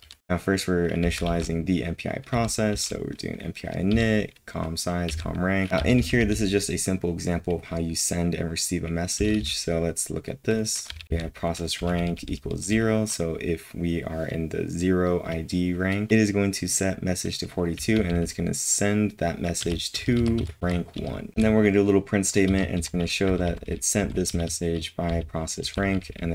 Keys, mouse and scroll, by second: 0.0-1.0 typing, 2.3 typing, 4.8-5.7 typing, 10.6-12.6 typing, 17.7 typing, 19.3-20.1 typing, 22.5 typing, 24.2-26.3 typing.